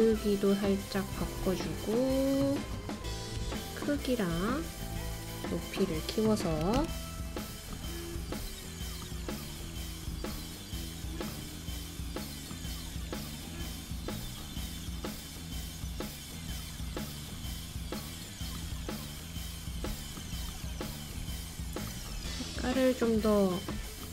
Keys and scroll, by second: 4.0-5.4 typing.